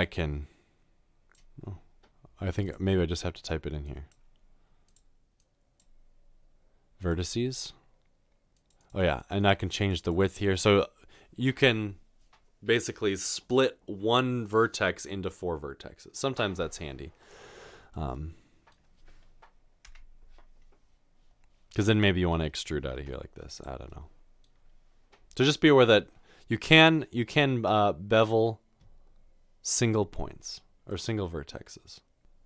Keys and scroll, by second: 22.9 typing, 32.2-32.4 typing.